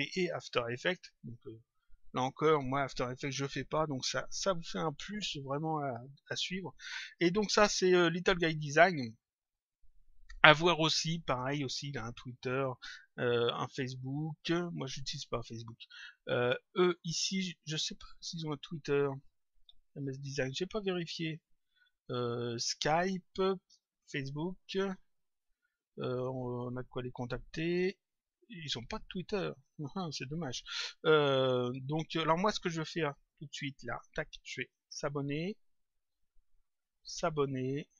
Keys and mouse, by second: 15.6 click, 19.2 click, 30.0 click, 33.2 click, 34.6 click, 36.0 click.